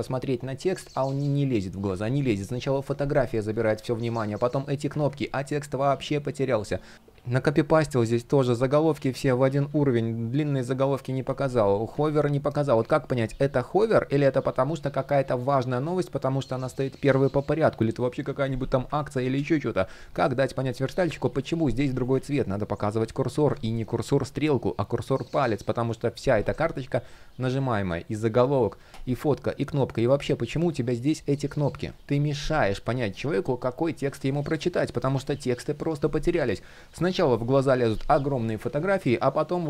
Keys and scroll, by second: 3.4 super+z, 4.6 super+z, 9.2 super+z, 18.7 super+z, 21.8 super+z, 22.9 super+z, 31.2 super+z, 38.3 super+z.